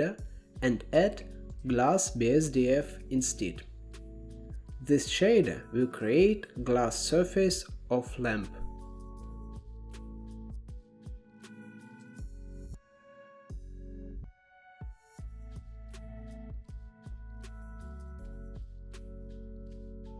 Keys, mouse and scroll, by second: 5.2-8.3 drag, 8.6-10.3 drag, 11.6-13.1 drag, 15.8-17.3 middle drag, 18.5-19.4 scroll down 4, 19.6 ctrl+b.